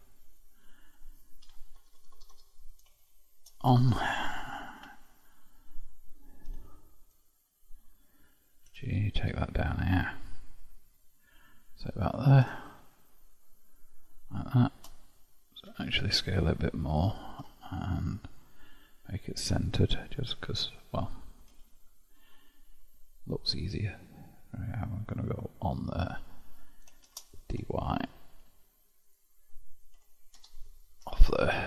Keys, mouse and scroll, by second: 0.2-1.6 middle drag, 1.6 Tab, 1.8 BackSpace, 2.0 BackSpace, 2.4 BackSpace, 3.8 o, 4.8 Tab, 6.5 KP_7, 7.3-7.9 scroll down 2, 7.9-8.7 scroll down 1, 8.7 g, 12.6-15.6 shift+middle drag, 18.3 click, 19.2-21.5 drag, 21.5 g, 27.1 shift+d, 30.0 Tab, 30.4 BackSpace, 31.1 f, 31.2 f.